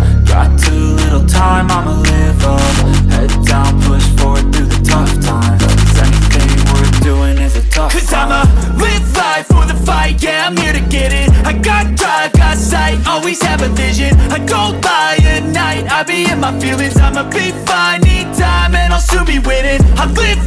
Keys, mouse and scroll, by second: 0.7-2.3 drag, 2.6-3.0 scroll down 1, 3.0-3.7 shift+middle drag, 3.7 click, 4.7-7.0 drag, 7.4-7.9 shift+middle drag, 7.9-8.2 scroll up 1, 8.2-8.5 scroll down 1, 8.5-8.9 shift+middle drag, 8.9 click, 10.8-12.3 drag, 12.8-16.0 drag, 16.0 n, 16.3-20.2 drag.